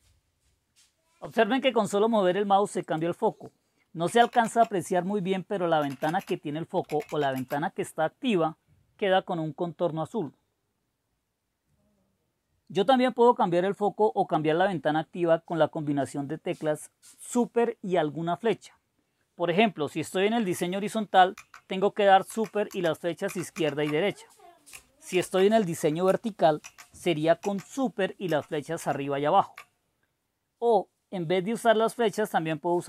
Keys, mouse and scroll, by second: 2.8 click, 4.0-7.6 typing, 21.3 super+Left, 22.4 super+Right, 22.7 super+Right, 23.3 super+Left, 23.7 super+Left, 25.1 super+e, 26.6 super+Down, 27.4 super+Down, 28.3 super+Up, 28.8 super+Up.